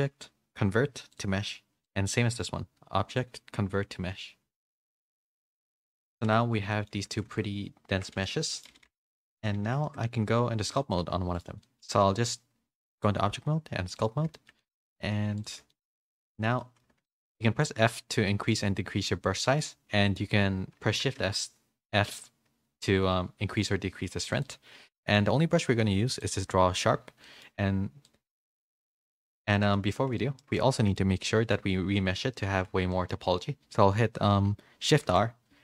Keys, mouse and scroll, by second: 1.8 click, 3.1-5.0 drag, 6.1 click, 6.1 a, 6.3 Tab, 6.7 middle click, 7.1 Tab, 7.1-8.1 drag, 8.1 Tab, 8.1 a, 8.4 middle click, 9.1 middle click, 9.1 a, 9.8 shift+middle click, 9.8 a, 10.7 click, 10.9 g, 11.6 middle click, 12.9-14.0 drag, 14.3 shift+middle click, 14.5 middle click, 15.7 shift+middle click, 15.7 shift+f, 15.9 middle click, 16.5 middle click, 17.0 shift+middle click, 21.0 shift+f, 27.2 middle click, 28.0 click, 29.2 ctrl+z, 29.4 middle click, 30.3 shift+middle click, 30.7 middle click, 32.9 shift+middle click, 34.9 shift+r.